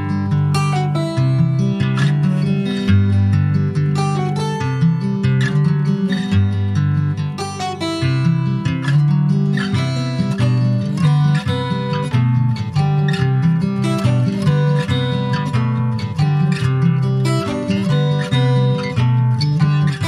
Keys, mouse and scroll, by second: 0.3 Tab, 1.1 ctrl+a, 2.8 click, 3.2 middle click, 3.9-4.2 shift+scroll up 3, 4.2 Tab, 4.5 click, 5.1 shift+click, 6.0 ctrl+b, 8.1-9.3 middle drag, 9.3 Tab, 9.8 click, 10.5 shift+middle click, 10.9 ctrl+s, 11.1 click, 11.3-12.6 right drag, 12.6 click, 13.1 click, 13.7-15.7 right drag, 15.7 click, 17.1 click, 17.5 middle click, 17.9 ctrl+s, 19.3 click.